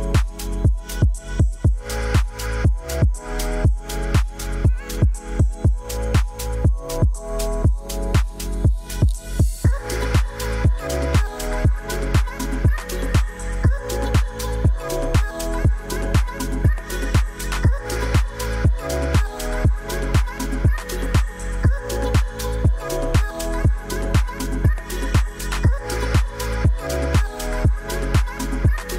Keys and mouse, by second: 1.8 click, 2.7-6.0 drag, 15.4 click, 16.8 click, 17.4 click, 22.2 click, 23.1 click, 24.7 click, 25.8 click.